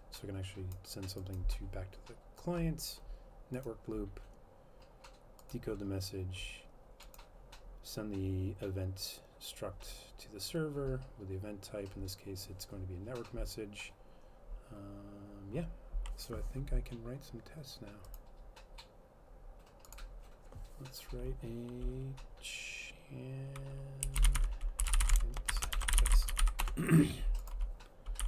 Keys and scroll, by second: 23.8-28.2 typing.